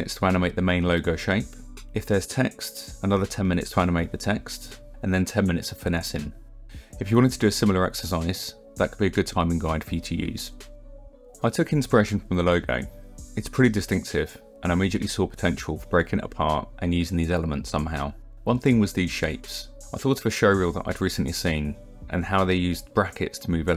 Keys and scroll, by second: 0.0-3.3 typing, 0.4 ctrl+=, 1.4 ctrl+=.